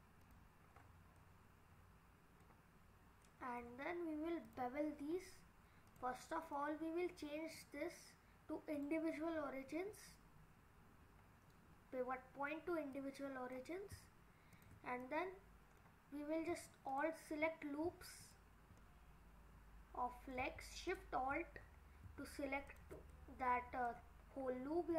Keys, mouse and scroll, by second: 0.6-1.2 scroll down 1, 1.2 middle click, 1.2 scroll down 2, 3.3 middle click, 4.5 click, 4.9-5.9 scroll up 4, 5.9 click, 6.3 middle click, 7.6 click, 12.9 click, 14.5 shift+click, 15.0 middle click, 16.9 alt+click, 18.2 alt+click, 18.8 middle click, 20.9 alt+shift+click, 21.6-21.9 scroll down 3, 22.7 alt+shift+click, 23.1 middle click, 23.9-24.5 scroll down 5.